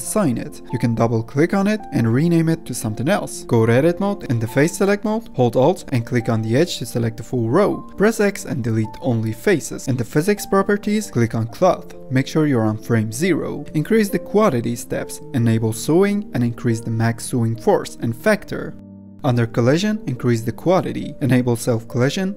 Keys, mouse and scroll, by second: 0.8-3.1 drag, 3.1 Tab, 4.1 click, 4.7 Tab, 4.9 3, 6.2 alt+click, 7.3 x, 9.7 Tab, 10.7 click, 12.2 click, 12.3-12.6 scroll down 1, 12.6 click, 13.5 scroll up 3, 13.8-15.6 drag, 15.7 scroll down 1, 16.7 scroll down 1, 17.0 click, 17.2-19.5 drag, 19.5-20.4 middle drag, 19.5-20.4 scroll down 2, 20.4-21.6 drag, 21.6-22.2 scroll down 2, 22.2 click.